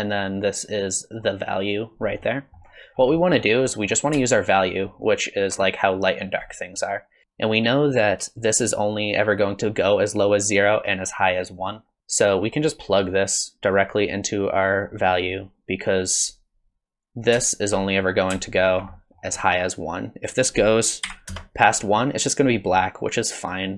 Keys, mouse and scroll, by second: 0.3 click, 2.2 middle click, 2.9 scroll down 2, 3.1 middle click, 3.7 middle click, 4.4 ctrl+shift+click, 4.7 ctrl+shift+click, 5.0 ctrl+shift+click, 6.5 middle click, 12.0 middle click, 12.0-12.7 scroll down 2, 12.7 click, 15.9 click, 17.8 middle click, 18.7 ctrl+shift+click, 19.0 middle click, 19.3-19.7 scroll up 7, 20.3 click.